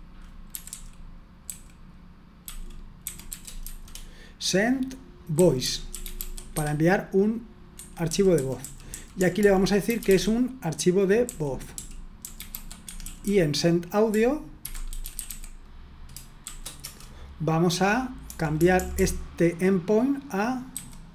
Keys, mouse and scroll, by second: 0.2-7.0 typing, 7.7 Escape, 8.0-10.0 typing, 11.2-12.9 typing, 14.4-16.9 typing, 18.2-18.9 typing, 20.5-21.1 typing.